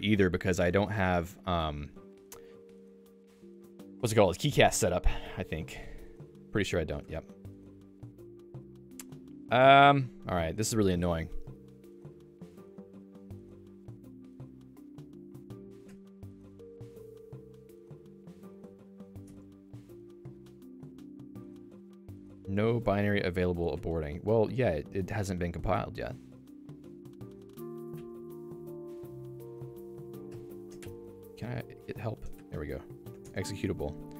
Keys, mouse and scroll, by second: 2.3 super+4, 24.3 super+e, 26.3 j.